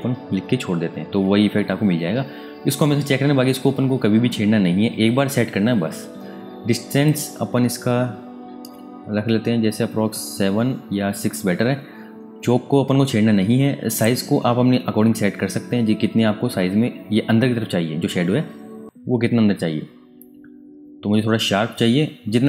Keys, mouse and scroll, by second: 0.4 Tab, 7.0 click, 7.7-8.7 scroll up 1, 8.7-12.1 scroll down 1, 13.9 click, 14.4-15.2 scroll down 1, 15.2-17.2 scroll up 1, 19.1-22.3 scroll down 1.